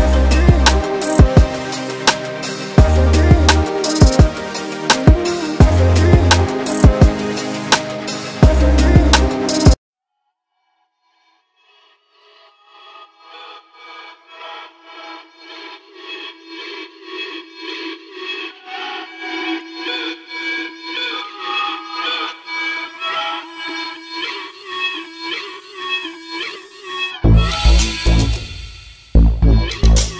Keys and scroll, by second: 4.4 space, 6.0 m, 7.8 m, 13.1 space, 15.2 space, 16.5 m, 17.1 space, 18.0 s, 19.7-20.6 typing, 21.7 m, 24.5 m.